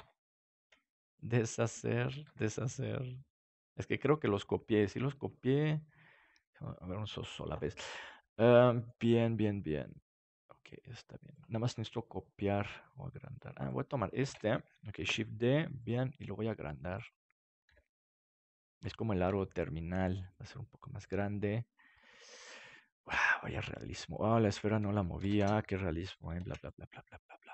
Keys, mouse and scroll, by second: 1.4 ctrl+z, 7.4 ctrl+z, 7.4-9.6 middle drag, 9.8-14.3 drag, 13.7 right click, 14.3 KP_7, 15.0 shift+d, 16.1 s, 17.0-18.4 drag, 17.6 g, 19.3 r, 21.0 g, 21.2-23.6 drag, 21.9 right click, 24.1-26.3 right drag, 25.0-27.4 drag, 26.3 ctrl+s.